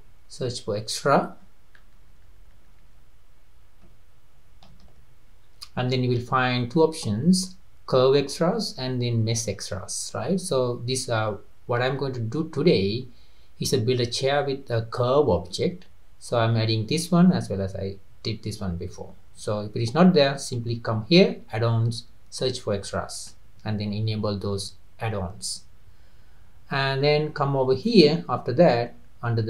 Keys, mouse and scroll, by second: 27.9-29.4 drag.